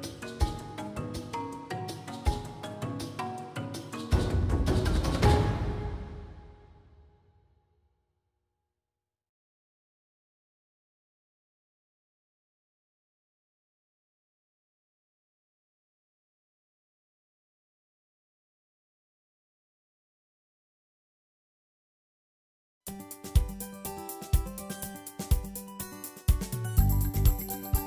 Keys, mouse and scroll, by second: 1.1 Tab, 1.3 scroll down 2, 1.7 middle click, 2.4 KP_Divide, 2.7 KP_1, 3.0 middle click, 3.1 scroll up 1, 3.3-4.5 shift+middle drag, 4.5-4.9 scroll down 1, 4.9 KP_1, 5.4 shift+middle drag, 5.6 click, 6.1-9.0 drag, 12.9 Tab, 13.1 middle click, 13.5 KP_Divide, 13.7 KP_1, 14.6 scroll down 3, 14.9 click, 15.9-17.8 typing, 16.4 click, 17.2 click, 18.6 click, 19.7 l, 20.2-21.5 drag, 21.6 l, 22.1-22.8 drag, 22.8 l, 23.1 click, 23.3 l, 23.7-25.1 drag, 25.7 Tab, 27.1 ctrl+s, 27.5 z.